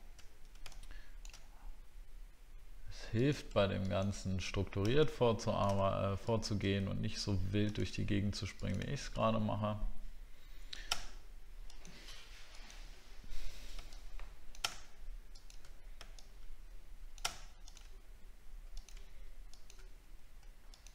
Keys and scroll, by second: 0.3 alt+scroll down 1, 3.5-4.9 alt+scroll down 1.